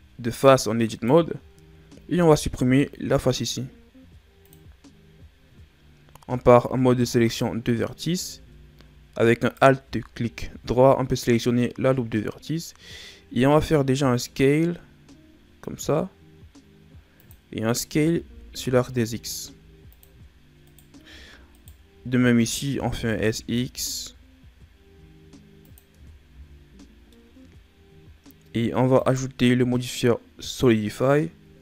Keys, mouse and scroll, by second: 0.8 shift+right click, 2.0 x, 6.2 ctrl+Tab, 9.3 alt+right click, 10.4 KP_1, 13.5 s, 17.8 s, 20.6 right click, 21.5 shift+right click, 22.6 s, 25.9 Tab, 26.2 a, 26.6 scroll down 4, 27.0 middle click, 28.9 click.